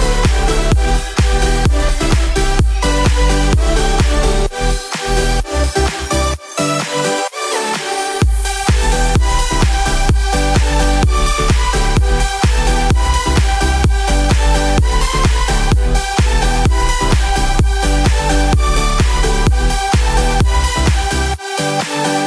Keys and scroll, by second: 8.8 ctrl+j, 20.2 ctrl+z.